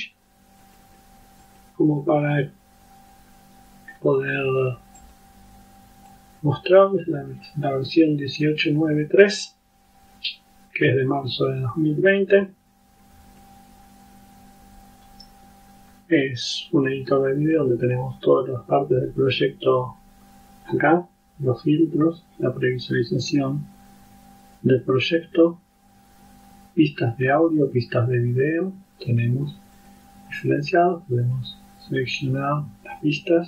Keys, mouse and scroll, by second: 0.7 click, 1.5 click, 5.1 click, 6.2-6.8 drag, 12.8 click, 23.3 click, 29.8 click, 30.4 click, 31.3 click.